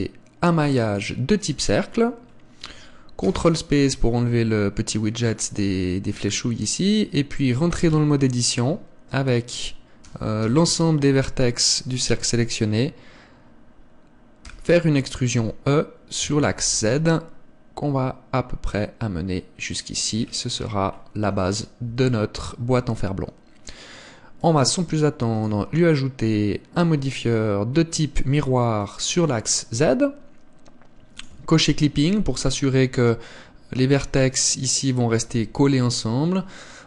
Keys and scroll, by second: 3.2 ctrl+space, 7.9 Tab, 10.1 a, 10.4 a, 14.5 e, 21.9 Tab, 32.7 Tab, 35.3 Tab.